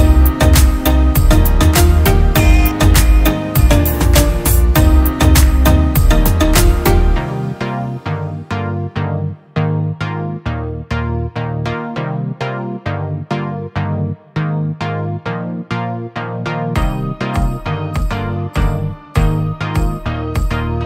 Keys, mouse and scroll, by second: 9.6 alt+click, 10.9 double click.